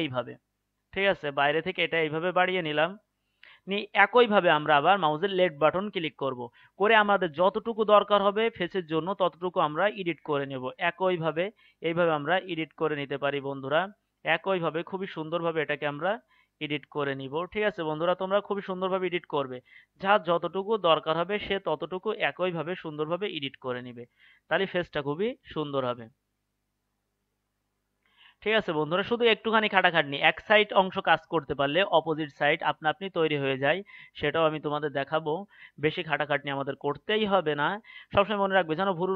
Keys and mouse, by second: 9.2-11.1 right drag, 12.5-21.3 right drag, 29.3-39.1 right drag.